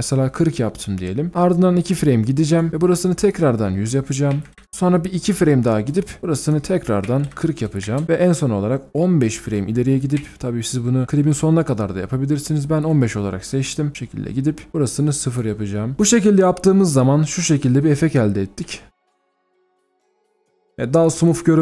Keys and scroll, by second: 4.3-5.1 typing, 6.8-7.8 typing, 7.8 Return, 8.3-9.2 alt+scroll down 1, 9.2-10.2 alt+scroll up 1, 10.2 shift+Page_Down, 11.0 shift+Page_Down, 15.9 alt+scroll down 1, 21.0 b.